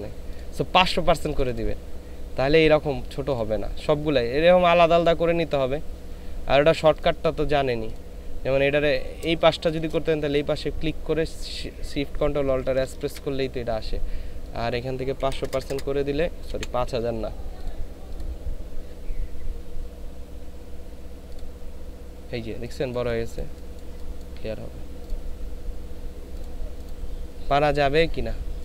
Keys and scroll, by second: 9.3 space, 12.6 ctrl+alt+shift+s, 15.2 KP_5, 15.4 KP_0, 16.4 BackSpace.